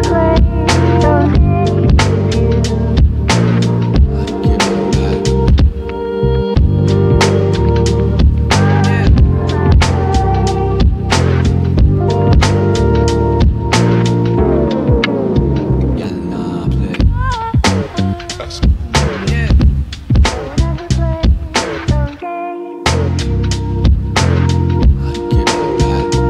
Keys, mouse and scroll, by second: 2.1 click, 12.1 typing, 12.3 scroll down 1, 12.6 shift+right click, 14.7-17.4 drag, 15.7 typing, 17.4 m, 19.6 right click, 20.7-21.1 scroll up 1, 20.7 typing, 22.5 click.